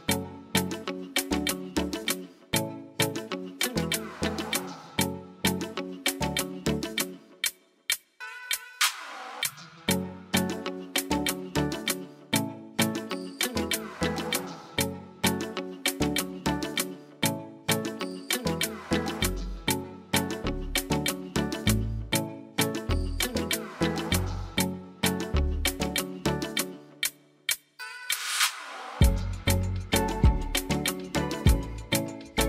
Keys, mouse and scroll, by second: 0.1 click, 1.0 click, 4.3 click, 4.4 click, 5.9 click, 6.2 click, 6.9 click, 8.8 click, 10.1 click, 17.0 click.